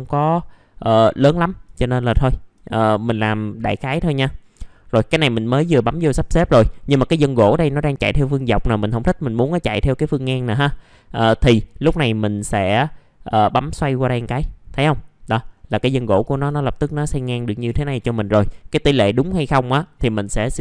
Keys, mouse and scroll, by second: 0.1-0.5 scroll down 1, 0.5 middle click, 1.8-2.1 scroll up 1, 2.2 alt+middle click, 2.7-3.9 scroll up 1, 3.9 middle click, 4.6-6.4 scroll down 1, 6.4 middle click, 8.1-12.3 scroll down 1, 13.2 click, 13.4 click, 15.3 middle click, 15.5 scroll down 1, 15.7 alt+middle click, 17.4 scroll up 1, 17.7 alt+middle click, 18.5-20.6 scroll down 1.